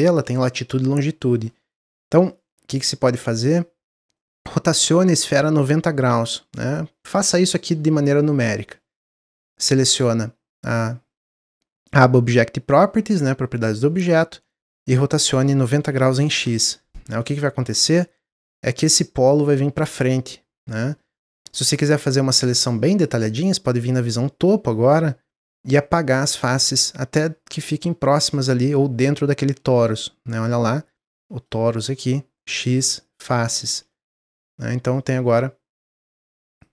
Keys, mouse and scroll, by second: 2.0 Tab, 3.4 click, 3.8-6.5 middle drag, 6.5 click, 15.1-17.1 drag, 17.1 middle click, 17.6 Tab, 17.9-20.9 middle drag, 21.6 middle click, 22.3-23.9 drag, 24.6 click, 26.9-27.4 scroll up 2, 27.4-30.4 drag, 30.4 click, 32.4 x, 33.6 Tab, 33.8-35.0 middle drag, 35.0-36.0 scroll down 2, 36.6 click.